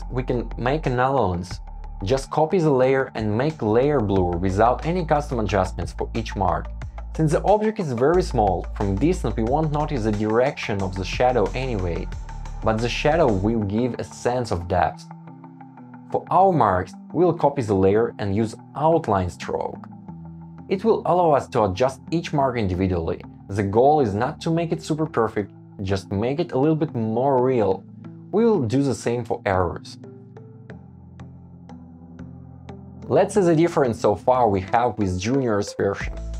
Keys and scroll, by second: 0.6 Up, 1.2 Up, 1.6 Down, 4.0 shift+Up, 4.4 shift+Down, 4.5 shift+Up, 5.1 Down, 6.5 shift+Down, 7.0 shift+Up, 7.7 shift+Down, 8.1 Escape, 13.4 Up, 20.0 Right, 20.1 alt+shift+Left, 21.6 Return, 22.2 shift+Right, 22.3 shift+Down, 22.4 shift+Right, 22.4 shift+Down, 22.5 shift+Right, 23.0 shift+Down, 23.1 shift+Right, 23.2 shift+Up, 23.4 shift+Down, 23.5 Left, 23.9 shift+Down, 24.2 Up, 24.5 Right, 24.9 Down, 25.6 shift+Down, 25.8 shift+Right, 26.2 super+z, 26.4 Left, 26.8 Right, 27.1 Return, 27.2 super+s, 28.3 Return, 28.4 Return, 28.7 alt+super+v, 28.8 shift+Right, 29.0 shift+Down, 29.1 shift+Up, 29.2 super+c, 29.3 super+v, 29.4 super+g, 29.5 Return, 29.7 shift+Down, 30.1 shift+Up, 30.2 Escape, 30.3 shift+Down, 30.4 Escape, 30.5 super+s, 31.2 Escape, 31.5 super+z, 32.2 shift+Down, 32.3 shift+Up, 32.8 Escape.